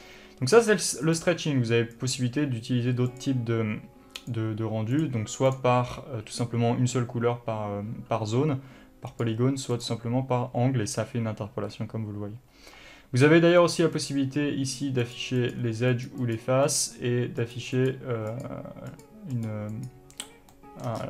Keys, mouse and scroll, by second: 1.3-14.0 drag, 14.2 click, 15.3 click, 15.7 click, 16.2 click, 16.5 click, 16.9 click, 17.7 click, 18.0 click, 18.6 click, 19.2 click, 19.6 click, 20.0 click, 20.7-21.0 scroll down 3, 20.8-21.0 middle drag.